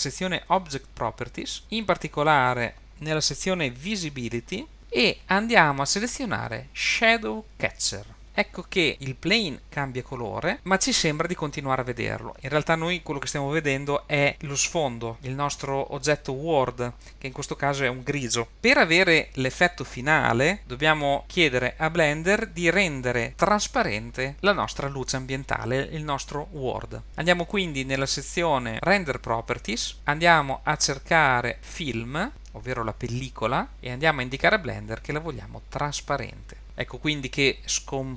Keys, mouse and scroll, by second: 1.6 click, 4.8 click, 4.8-5.1 scroll down 6, 8.2 click, 27.1 click, 27.1-27.6 scroll down 5, 29.9 click, 32.3 click, 32.3-33.7 scroll down 5, 36.6 click.